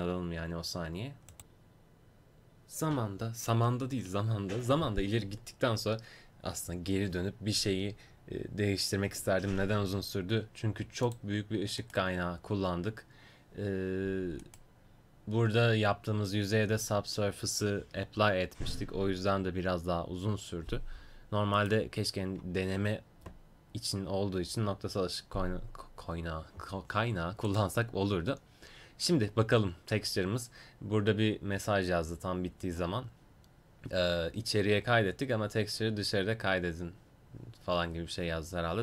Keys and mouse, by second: 11.9-38.8 right drag.